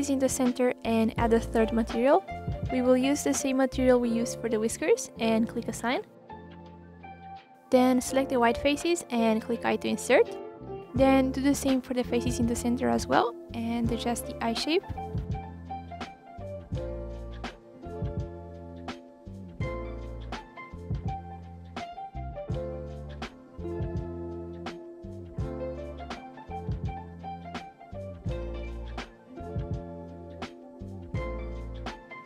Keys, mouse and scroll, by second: 0.2 shift+click, 0.8-1.5 scroll down 1, 2.2-6.3 drag, 6.3 s, 7.4 i, 10.3 alt+click, 10.9 shift+click, 11.7 i, 13.1-13.7 scroll down 4, 13.7 s, 14.8 ctrl+KP_Add, 15.0 click, 15.3-15.8 scroll up 6, 15.8 click, 16.7-17.2 scroll down 2, 17.2 ctrl+KP_Add, 18.8 right click, 19.2 scroll down 4, 19.4 scroll up 1, 19.5 middle click, 20.2 r, 21.4 KP_1, 21.7-22.1 scroll down 4, 22.1-22.5 scroll up 2, 22.5 s, 23.4-23.7 scroll down 1, 23.7-24.1 scroll up 1, 24.1 click, 25.2 s, 26.0 ctrl+z, 26.0 ctrl+z, 26.3 middle click, 26.8 scroll down 1, 26.9 middle click, 27.3 scroll up 1, 27.6 r, 28.4 KP_1, 28.6 scroll up 1, 28.8 s, 29.3 scroll down 1, 29.5 scroll up 1, 29.6 middle click, 30.3 scroll up 1, 30.6 KP_3, 30.7 scroll down 2, 30.8 scroll up 1, 31.4 click, 31.8 middle click.